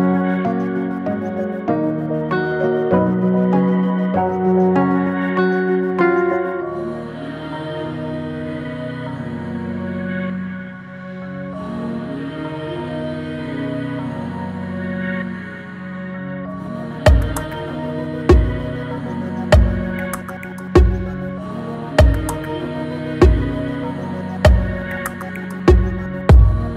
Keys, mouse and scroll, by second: 1.4 middle click, 1.9-2.8 scroll down 2, 2.8 click, 3.1 click, 3.6 alt+middle click, 3.9 alt+middle click, 4.4 scroll up 2, 4.7 shift+middle click, 5.4 s, 7.7 middle click, 8.2 scroll up 1, 8.7 alt+middle click, 9.6 shift+middle click, 10.5 scroll up 1, 10.6 s, 12.0 scroll down 2, 12.2-14.1 middle drag, 23.2-23.6 scroll up 3, 23.6-24.7 middle drag, 24.7-25.4 scroll down 6, 25.4 middle click, 26.2 shift+a.